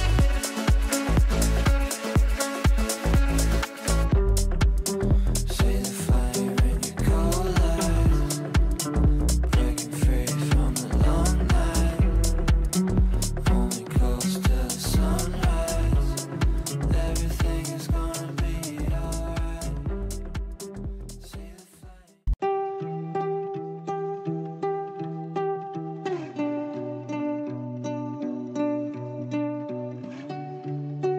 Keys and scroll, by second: 0.1 Caps_Lock, 1.9 f.